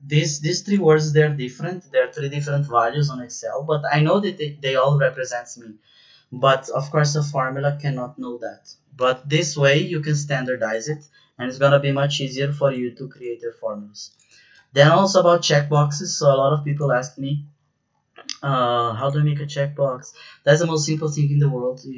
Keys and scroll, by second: 9.0 BackSpace.